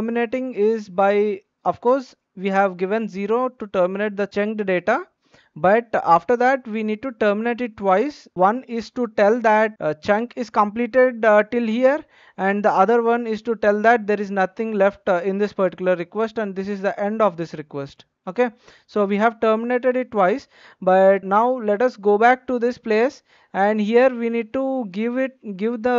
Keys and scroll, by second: 8.3 Return.